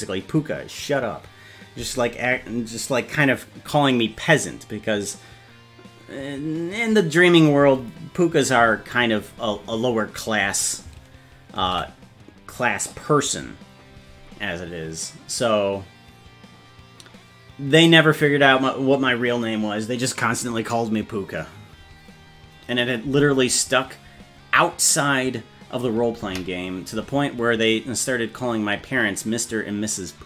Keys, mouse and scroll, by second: 11.8 ctrl+s.